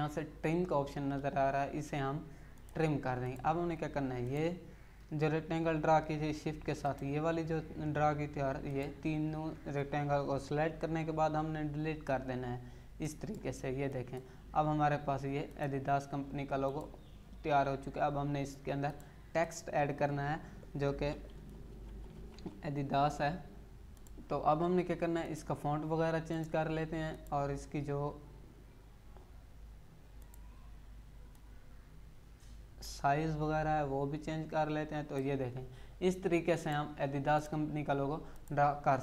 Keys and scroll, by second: 10.9 Delete, 20.8-22.8 typing.